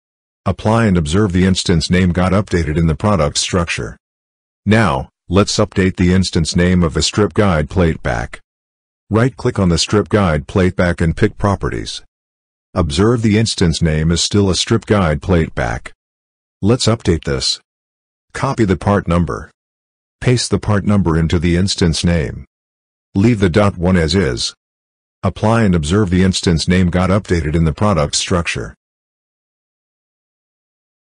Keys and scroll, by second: 16.8 ctrl+c, 19.3 ctrl+v.